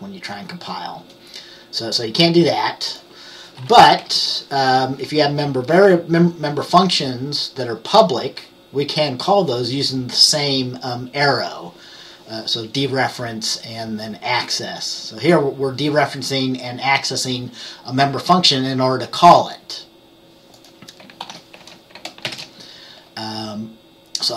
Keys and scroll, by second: 4.1 typing, 21.3 ctrl+s, 22.4 ctrl+b.